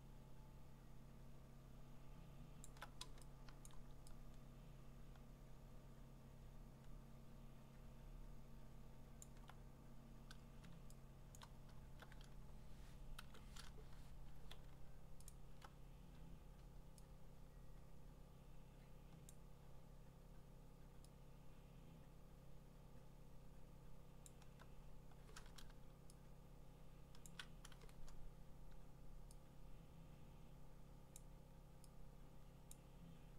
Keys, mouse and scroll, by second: 2.6 alt+click, 3.3-4.1 typing, 3.7 click, 9.2-11.4 alt+click, 11.2 alt+click, 11.4 click, 14.1 Escape, 15.3 alt+click, 19.3 alt+click, 24.2 alt+click, 27.2 shift+click, 30.3 shift+click, 31.1 shift+click, 32.7 shift+click.